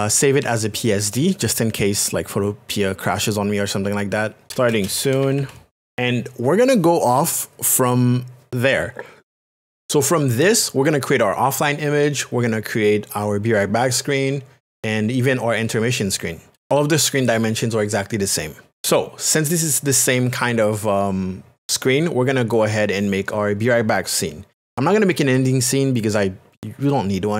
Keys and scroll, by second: 4.2-5.9 typing.